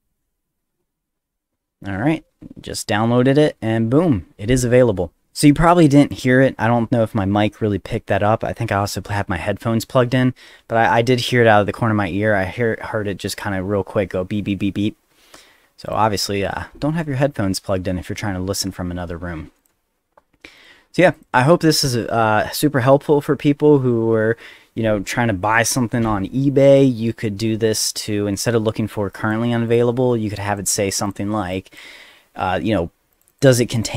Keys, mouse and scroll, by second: 5.5-6.1 drag, 15.9 click, 19.6 click, 20.6 click, 21.1 click, 28.3 middle click, 29.1 click, 29.7 click, 30.4 click, 31.0 click, 31.5 click, 33.1 click, 33.3 click, 33.7 click.